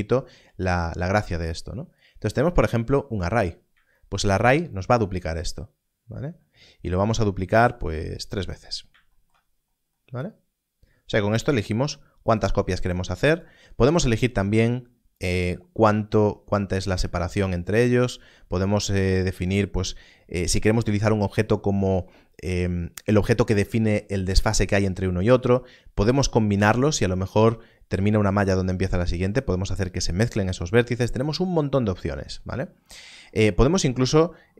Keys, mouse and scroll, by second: 1.9 click, 3.3 scroll down 1, 8.5 click, 9.3 scroll down 1, 12.2 click, 17.0 shift+click.